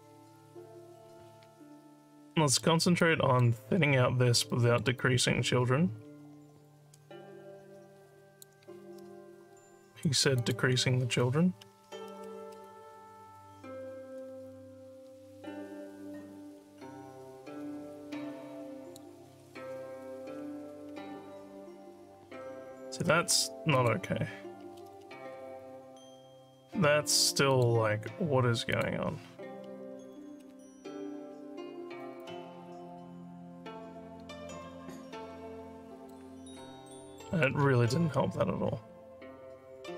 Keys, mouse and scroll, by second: 2.3 alt+middle click, 3.0 alt+click, 4.5 alt+middle click, 5.0-8.4 alt+drag, 10.4 click, 14.5-19.0 alt+drag, 19.9 click, 23.8 click, 27.5 click, 28.7 click, 32.2-36.1 alt+drag, 37.3 alt+middle click.